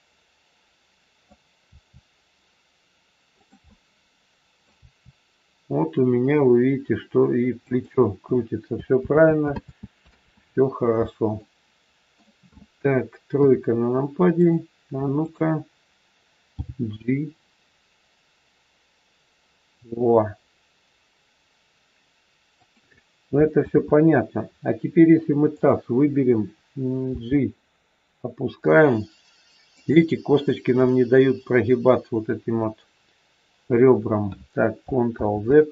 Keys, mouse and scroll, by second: 1.6 r, 3.6 middle click, 4.8 r, 8.9 ctrl+z, 9.5 ctrl+z, 10.2 ctrl+z, 11.4 middle click, 13.3 KP_3, 14.3 click, 15.2 click, 16.4 g, 23.5 ctrl+z, 25.5 click, 27.0 g, 35.1 ctrl+z.